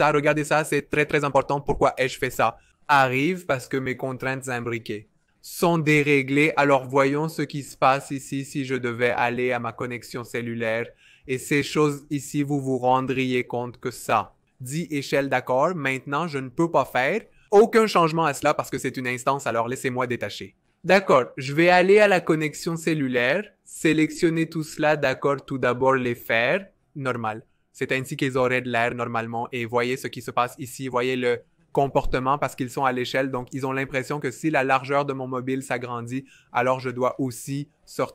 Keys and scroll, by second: 20.0 alt+super+b.